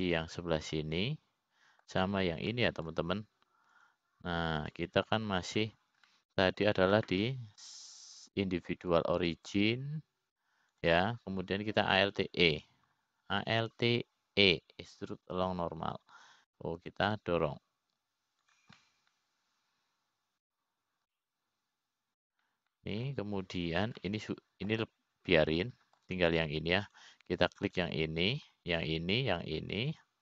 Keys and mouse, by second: 0.7 click, 1.7 shift+click, 2.8 shift+click, 3.4-4.6 middle drag, 5.1 middle click, 6.4 shift+click, 7.2 shift+click, 8.1 shift+click, 8.6 middle click, 10.3-13.5 drag, 14.7 alt+e, 21.4-23.1 middle drag, 23.7-25.8 middle drag, 26.6 middle click, 28.1 middle click, 29.4 click.